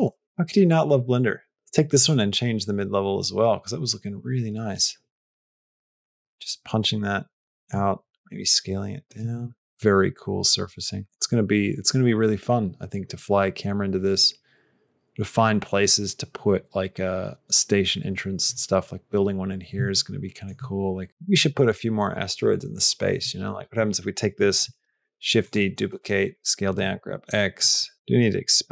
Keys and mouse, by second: 0.1 g, 0.2 g, 0.2 r, 1.1 r, 2.1-7.5 drag, 7.9 s, 9.7-18.3 middle drag, 19.9 shift+middle click, 23.5 click, 24.9 shift+d, 25.9 s, 26.6 g, 27.7 g, 27.9 g.